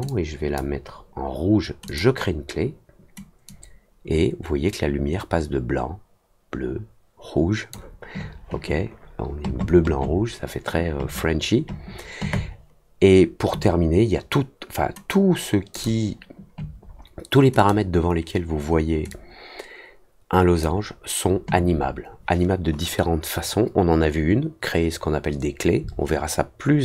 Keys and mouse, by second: 0.0 click, 1.8 click, 3.4-7.7 drag, 15.7 click, 17.5 click, 19.0-20.6 drag.